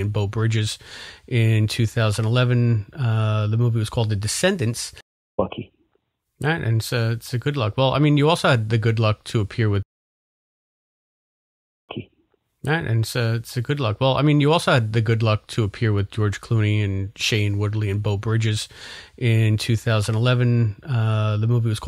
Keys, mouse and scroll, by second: 0.5 click, 4.9 space, 5.2 click, 5.3 space, 7.0-8.0 drag, 8.8 click, 9.8 space, 10.2 click, 11.7 click, 11.8 space, 14.2 ctrl+s, 20.3-21.8 drag.